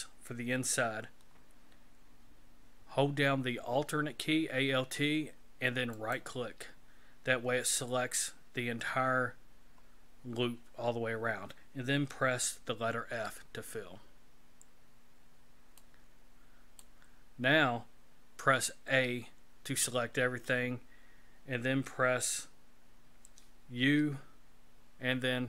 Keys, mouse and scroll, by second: 6.0 alt+right click, 9.5 scroll down 2, 13.1 f, 15.2 scroll down 3, 15.8 middle click, 18.9 a, 23.8 u.